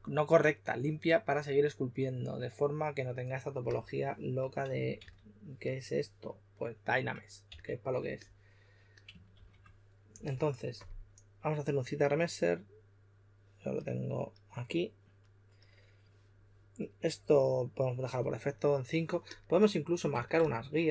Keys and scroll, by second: 4.9 s, 7.4 s, 9.3 shift+f.